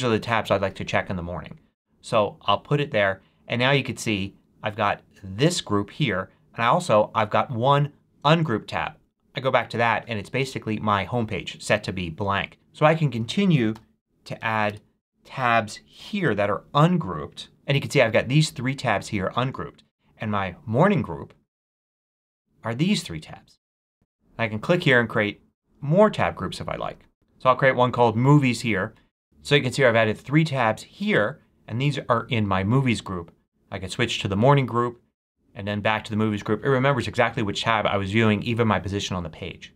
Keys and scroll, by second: 13.4-14.8 typing, 15.4 super+Return, 15.8 super+t.